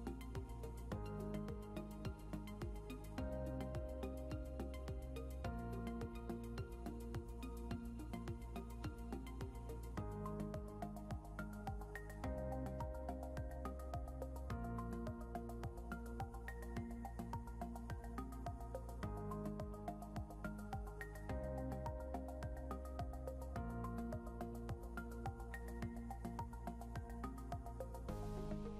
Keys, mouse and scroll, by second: 0.0-1.9 typing, 21.8 click, 26.4 scroll up 1.